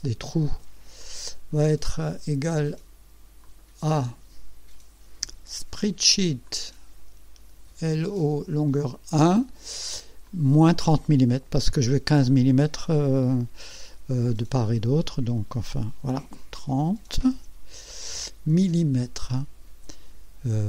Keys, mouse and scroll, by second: 1.0 click, 3.4 click, 5.7 s, 6.5 click, 7.6 l, 8.8 click, 10.3 click, 16.7 KP_3, 18.5 m.